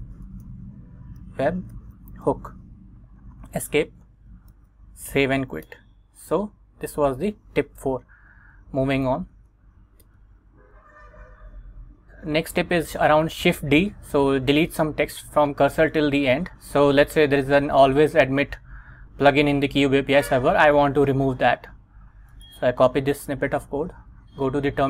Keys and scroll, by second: 0.0-2.4 typing, 3.4 Escape, 4.6 shift+;, 5.2 x, 5.8 Return, 8.7 super+Tab, 10.2 Return, 10.9 Right, 23.9 super+Tab, 24.6 Return.